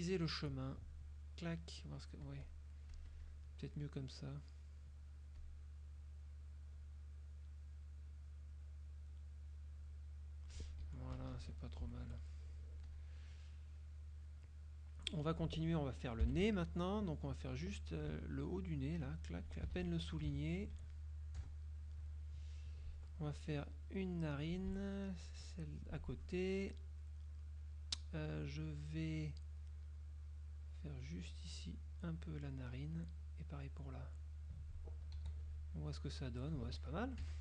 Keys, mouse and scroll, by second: 1.2 click, 2.3 click, 3.0 click, 3.8 click, 4.2 click, 5.4 click, 6.0 click, 7.1 click, 7.4-8.5 drag, 8.6 click, 9.9 click, 11.0 F1, 11.0 click, 11.4 KP_Subtract, 12.0 F1, 12.2 F2, 12.4 click, 13.0 click, 13.6 click, 15.1 click, 16.4 F6, 19.0 shift+click, 19.6 shift+right click, 19.9 ctrl+shift+z, 20.6 shift+click, 21.5 KP_Add, 22.4 click, 23.8-24.4 shift+drag, 25.4-26.0 shift+drag, 31.7 shift+click, 33.8 shift+click, 35.2 z, 35.5 click, 37.3 F6.